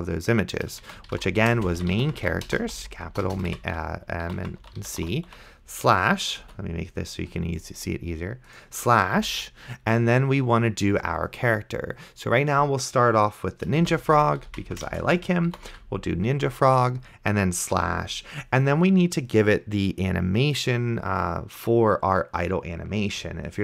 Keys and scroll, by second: 0.8-5.8 typing, 6.7 alt+z, 9.2 /, 13.8-16.2 typing, 17.8 /.